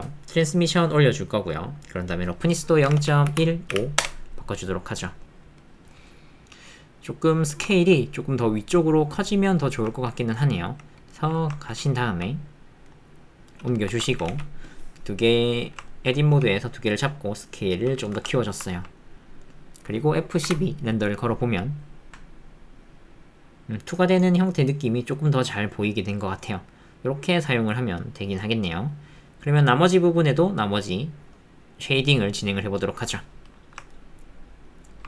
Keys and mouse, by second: 0.6 click, 1.4 middle click, 2.1-4.1 drag, 5.2 click, 5.9 click, 5.9 middle click, 6.1 click, 6.1 middle click, 6.3 click, 7.5 shift+click, 7.7 ctrl+click, 9.6 shift+click, 9.9 ctrl+click, 10.2 click, 11.4 ctrl+shift+middle click, 11.6 ctrl+middle click, 13.9 Tab, 14.3 alt+z, 14.8 click, 15.9 ctrl+click, 16.3 g, 18.2 Tab, 18.7 ctrl+middle click, 19.0 middle click, 19.4 click, 19.4 middle click, 19.6 click, 33.9 ctrl+middle click, 33.9 ctrl+click, 34.1 ctrl+middle click, 34.9 ctrl+middle click.